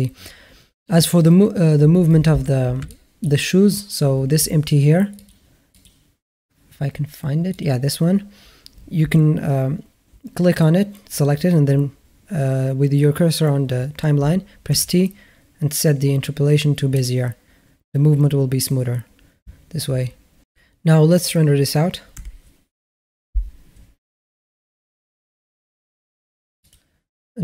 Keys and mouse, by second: 2.7-3.1 middle drag, 5.0 click, 5.5 click, 14.5 t.